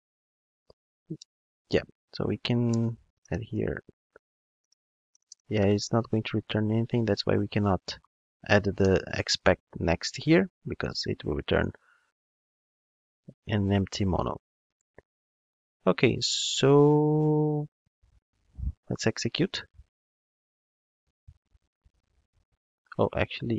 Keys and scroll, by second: 1.2 Return, 10.7 super+z, 21.3 ctrl+shift+d.